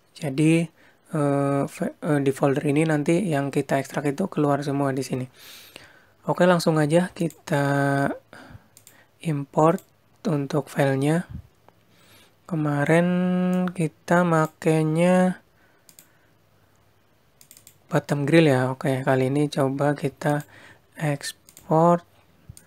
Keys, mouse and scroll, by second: 6.1 click.